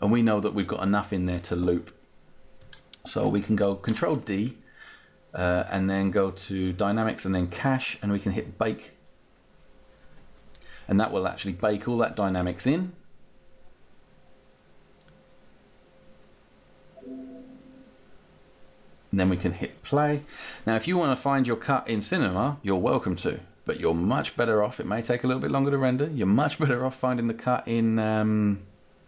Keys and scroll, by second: 3.7 ctrl+d.